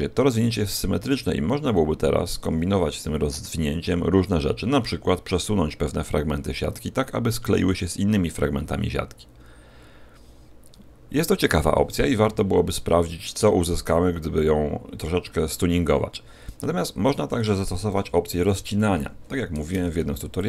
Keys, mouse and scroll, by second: 4.0-5.2 scroll up 1, 5.2 a, 17.9 KP_1, 18.9 z, 19.6 ctrl+Tab.